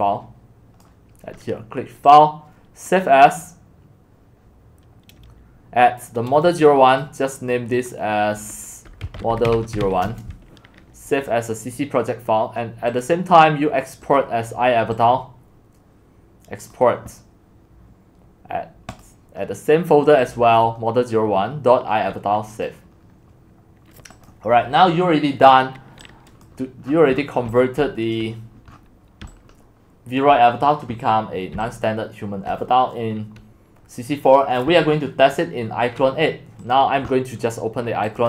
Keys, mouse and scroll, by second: 0.9 click, 3.0 click, 5.4-9.0 drag, 8.8-10.0 typing, 11.2-11.9 typing, 13.0-20.4 drag, 22.7 click, 24.6-26.9 drag, 26.1 right click, 26.9-27.5 scroll down 9, 27.2-30.1 typing, 28.2 click, 28.7-29.2 scroll down 8, 30.3 click, 31.5-32.5 typing, 32.5-34.0 drag.